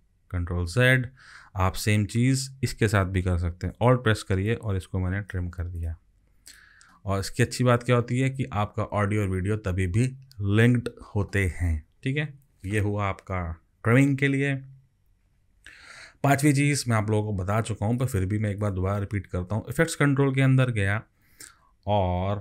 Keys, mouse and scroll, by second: 0.5 ctrl+z, 4.5 alt+click, 12.5 ctrl+z.